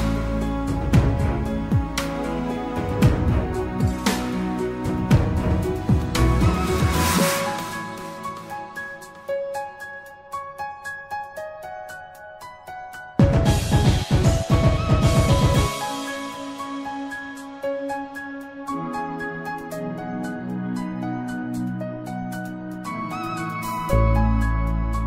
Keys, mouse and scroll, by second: 0.0 ctrl+r, 11.2-13.2 middle drag, 13.2 ctrl+r, 17.0 alt+middle click, 17.8-19.3 scroll up 2, 19.3 s.